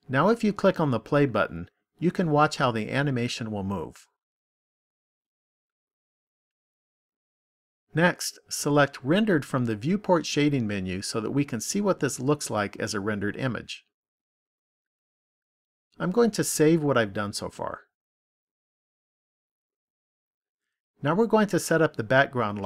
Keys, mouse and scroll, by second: 1.6 click, 7.4 click, 10.7 click, 18.4 click.